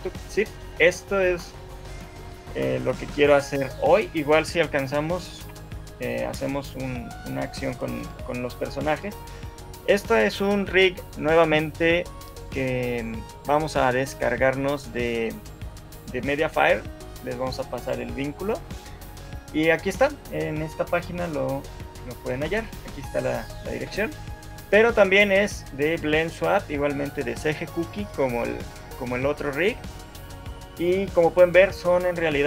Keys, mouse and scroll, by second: 0.0 middle click, 4.2 scroll down 4, 4.6 shift+middle click, 5.4 KP_1, 7.4 middle click, 8.2 scroll up 1, 8.6 shift+middle click.